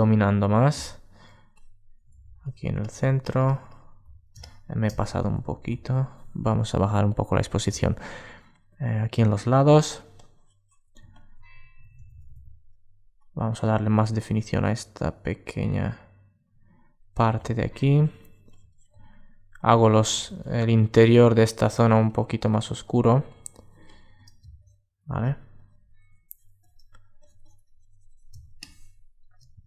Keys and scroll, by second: 5.1 alt+super+z, 10.7 super+space.